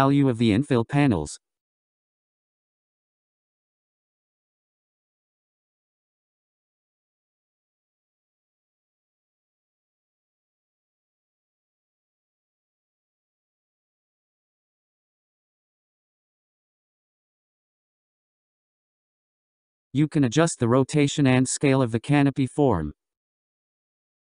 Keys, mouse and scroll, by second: 0.8-1.4 scroll up 3, 3.6-6.5 scroll up 1, 6.5-9.5 drag, 11.1-17.8 drag, 17.8 1, 18.9-21.2 scroll down 14, 21.2-21.6 scroll down 4, 21.6-22.9 scroll up 11, 22.9-24.3 scroll up 4.